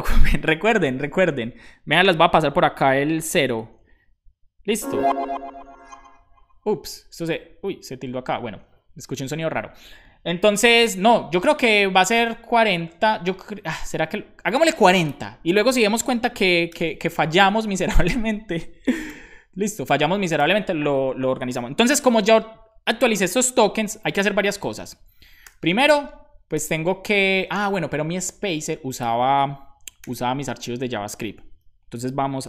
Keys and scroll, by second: 16.5-17.3 typing, 17.4 super+s, 19.6 super+s, 23.9 super+p, 25.4 super+j, 30.0 super+j.